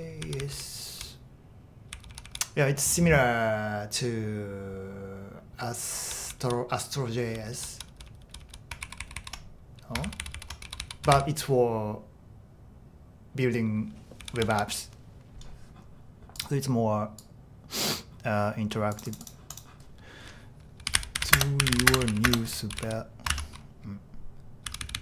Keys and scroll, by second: 0.2-0.7 typing, 8.9 ctrl+d, 9.0 ctrl+d, 9.2 ctrl+d, 10.1 ctrl+u, 10.2 ctrl+u, 10.4 ctrl+u, 10.4-11.6 typing, 14.2-14.5 typing, 20.6-23.4 typing, 24.7-25.0 typing.